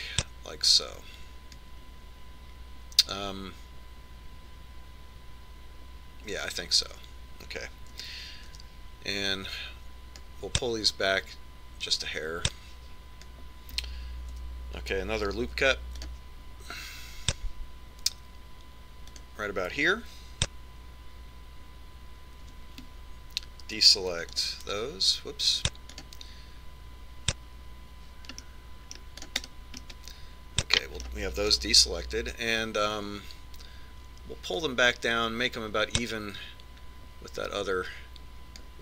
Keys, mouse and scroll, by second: 0.1 click, 9.1 a, 9.7 b, 12.4 click, 15.5 a, 16.6 ctrl+r, 23.6 c, 30.7 right click, 31.1-32.8 middle drag, 33.0 KP_3, 35.9 click.